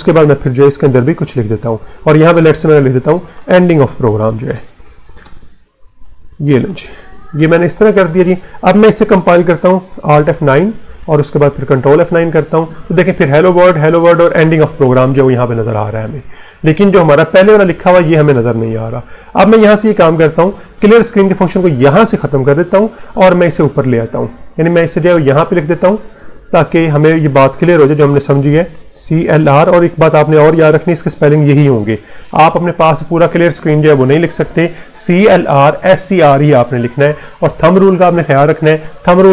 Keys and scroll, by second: 0.0-0.8 typing, 1.1 Left, 2.3-7.3 typing, 2.7 Left, 10.0 alt+F9, 10.8 Return, 11.6 ctrl+F9, 17.3 Return, 20.4 BackSpace, 22.9 Up, 23.8 Left, 25.4 Down, 25.9 Right, 26.3 \, 27.2 BackSpace, 27.5 Return, 28.4-32.3 typing.